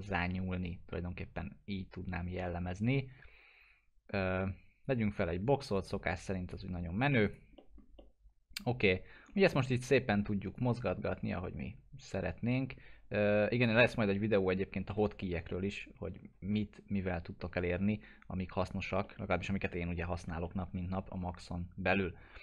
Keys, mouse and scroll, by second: 4.8 scroll up 1, 4.8 click, 7.3 right click, 7.6 middle click, 8.3-9.5 alt+middle drag, 9.5 w, 10.9-13.7 drag, 14.1-14.8 alt+middle drag, 14.9 j, 15.5-16.4 alt+middle drag, 20.4-22.0 alt+middle drag.